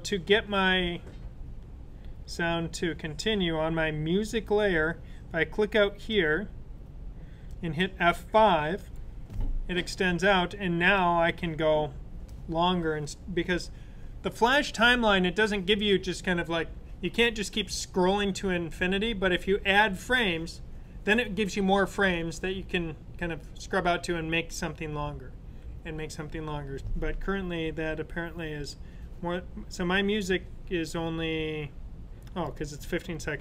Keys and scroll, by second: 8.9 F5.